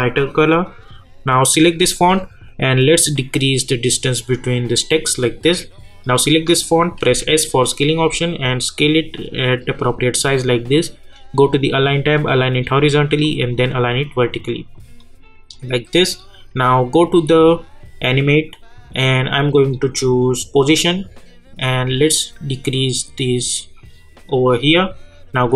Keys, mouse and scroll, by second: 7.0 s, 7.9-11.4 drag, 20.6-25.5 drag.